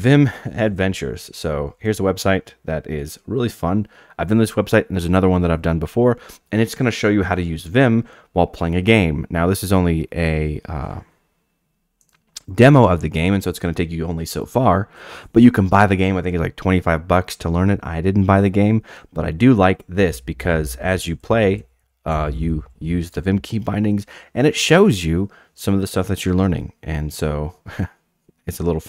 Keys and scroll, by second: 2.3 ctrl+r, 20.4-23.6 typing.